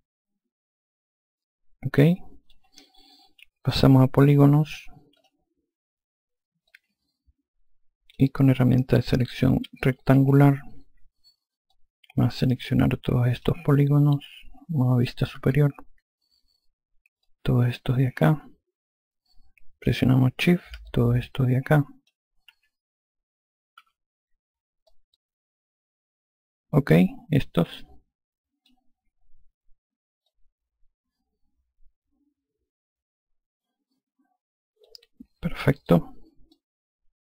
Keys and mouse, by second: 5.1 click, 6.6 alt+click, 10.1 5, 11.7 alt+click, 15.3 F2, 17.2 click, 20.8 shift+click, 23.7 F1, 24.9 click, 30.2 click, 36.5 click.